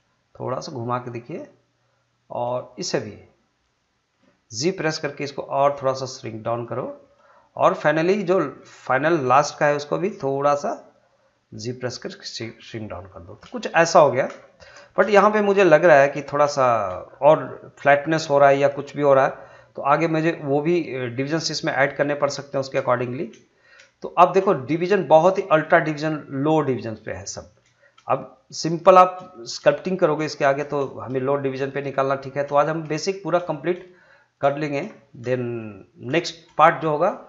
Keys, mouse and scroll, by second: 0.3 middle click, 2.7 shift+click, 5.1 g, 6.5 click, 6.8-8.2 middle drag, 8.2 click, 8.9 shift+click, 9.4-11.3 middle drag, 11.3 g, 12.1 click, 12.4 scroll down 1, 12.6 middle click, 13.3 scroll up 1, 13.6 shift+middle click, 14.2 scroll up 1, 14.4 shift+middle click, 16.5 shift+middle click, 17.0 scroll down 1, 17.3-19.9 middle drag, 19.9 click, 20.4 middle click, 21.1 scroll down 1, 21.3 middle click, 22.2 scroll down 1, 22.5 shift+middle click, 23.3 scroll down 1, 23.4 shift+middle click, 24.4 scroll up 1, 24.5 shift+middle click, 25.2 scroll up 1, 25.5-27.2 shift+middle drag, 27.7 shift+middle click, 28.1 middle click, 30.1 scroll up 2, 30.3 shift+middle click, 30.7 scroll down 2, 30.9 shift+middle click, 31.4 scroll down 2, 31.7 shift+middle click, 32.4 scroll up 1, 32.7 shift+middle click, 33.2 scroll up 2, 33.5 shift+middle click, 34.6 shift+middle click, 35.4 shift+middle click, 36.2 shift+middle click.